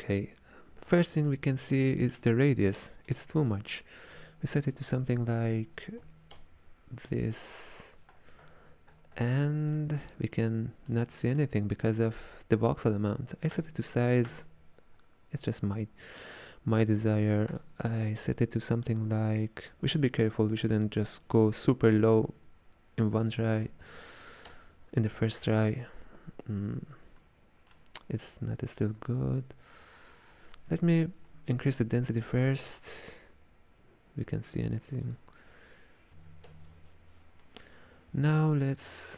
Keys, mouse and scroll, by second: 1.0-3.1 middle drag, 3.1-5.1 drag, 5.1 KP_0, 8.2-9.8 scroll up 19, 9.8-13.6 middle drag, 13.6-16.7 drag, 17.6-20.7 drag, 27.3-28.8 middle drag, 28.8-35.0 drag, 35.1 click.